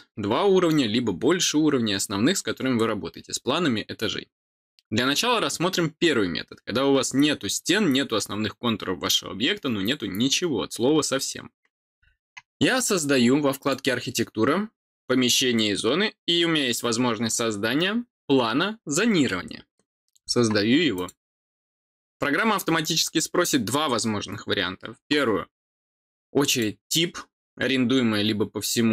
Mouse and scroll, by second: 26.4 click.